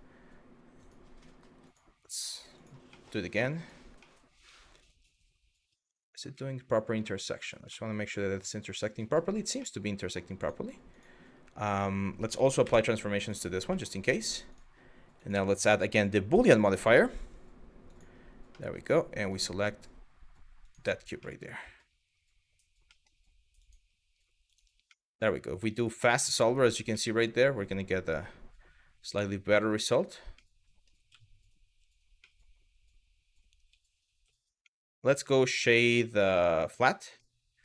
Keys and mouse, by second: 0.4 click, 1.3 click, 2.6 middle click, 3.2 click, 3.6-5.4 middle drag, 6.0 middle click, 6.7 shift+middle drag, 7.3-8.9 middle drag, 9.2-9.8 middle drag, 12.3 ctrl+a, 13.4 middle drag, 13.7 click, 14.8-17.7 drag, 18.2 middle click, 20.9-21.4 middle drag, 22.6 middle click, 23.2 click, 24.1 click, 24.6-26.0 middle drag, 26.7-29.3 middle drag, 30.1-30.5 middle drag, 30.7 z, 31.8-33.3 middle drag, 33.3 z, 34.3 middle drag, 36.9-37.3 middle drag.